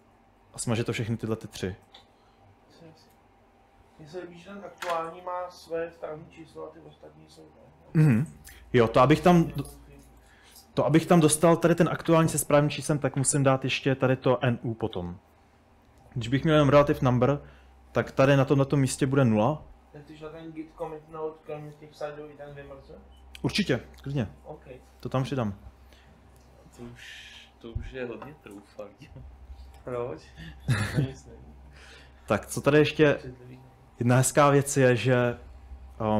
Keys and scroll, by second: 0.6 typing, 25.7-26.8 typing, 29.8 typing, 33.0-33.9 typing, 35.7-36.1 typing.